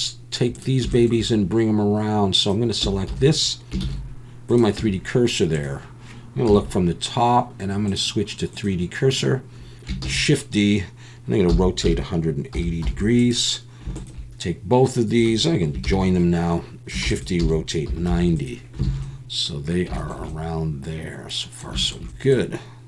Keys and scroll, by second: 2.8 Tab, 3.1 a, 3.8 shift+s, 4.8 Tab, 6.5 KP_7, 10.0 shift+d, 11.5 r, 11.8 1, 12.5 8, 12.8 0, 15.8 ctrl+j, 17.0 shift+d, 17.4 r, 17.8 9, 18.1 0, 18.8 alt+a.